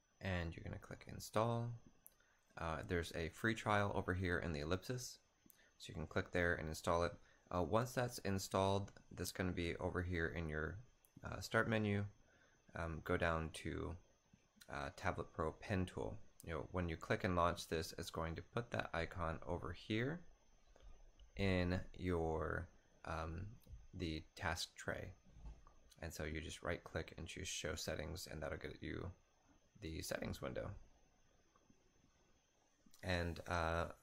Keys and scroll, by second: 9.8 super+t.